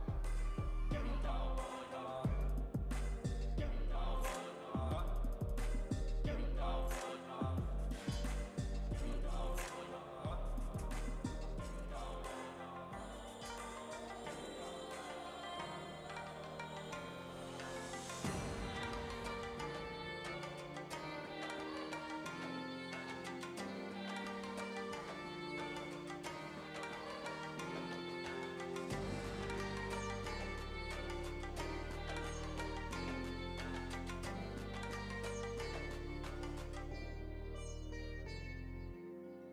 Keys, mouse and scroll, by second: 9.5 space, 12.2 space, 13.3-15.5 shift+drag, 15.5 space, 20.9 space, 23.2-29.9 shift+drag, 32.1 space.